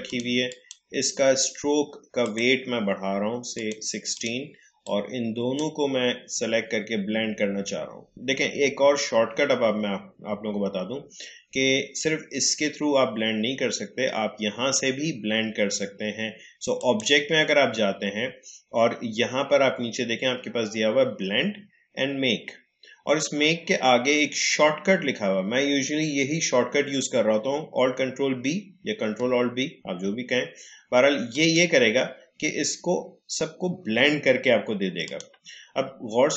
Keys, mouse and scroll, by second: 16.7 click, 31.3 click, 35.0 click, 36.0-36.3 alt+scroll up 1.